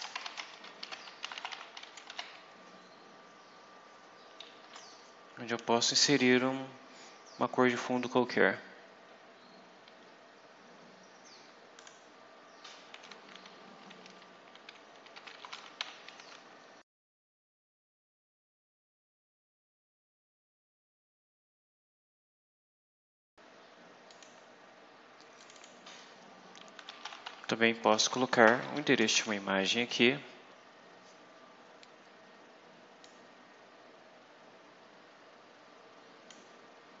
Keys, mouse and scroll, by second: 0.0-2.5 typing, 4.5 Left, 11.7 click, 14.8-17.7 typing, 17.5 click, 17.9-18.5 scroll down 6, 18.5-19.5 scroll up 6, 19.8 scroll down 2, 20.9 click, 22.3 click, 22.5 click, 22.8 scroll down 2, 24.0 click, 25.3 click, 26.5-27.9 typing, 28.7 shift+Left, 29.1 ctrl+shift+v, 32.9-34.1 drag, 35.2-36.3 drag.